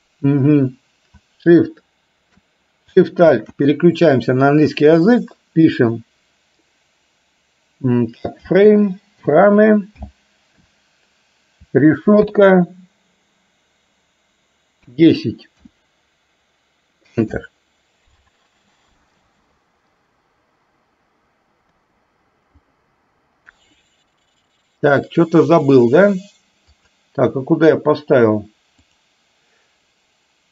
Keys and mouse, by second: 19.3 space, 21.8 space, 22.7 click, 26.8 click, 29.0-30.5 drag.